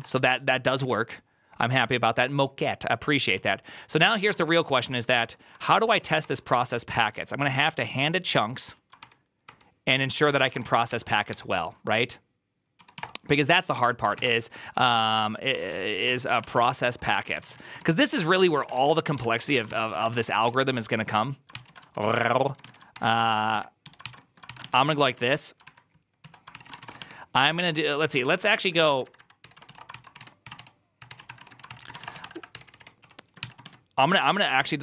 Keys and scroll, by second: 0.0-0.2 typing, 3.3 alt+{, 4.0-8.5 typing, 5.9 Return, 6.1 ctrl+d, 8.9 ctrl+d, 9.7 ctrl+d, 10.0-11.2 typing, 12.4-14.5 typing, 13.7 Return, 15.6-34.8 typing, 21.4 ctrl+c, 25.6 Return, 25.6 alt++, 26.1 alt+{, 34.4 ctrl+c.